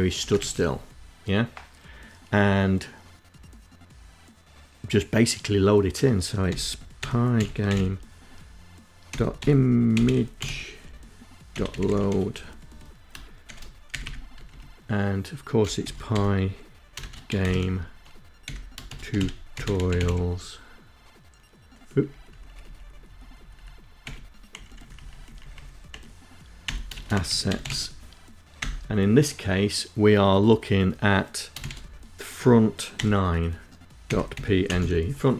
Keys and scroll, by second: 5.5-11.7 typing, 13.0 ', 13.6 Left, 14.9-19.7 typing, 21.1 Left, 21.7 Left, 21.9 Left, 22.0 Left, 22.3 Left, 22.5 Left, 22.6 Left, 23.1 Delete, 23.6 Right, 23.8 Right, 23.9 Right, 24.3 Right, 24.5 Right, 25.0 Right, 25.5-27.7 typing, 30.6 shift+f, 32.0-34.2 typing, 35.2 End.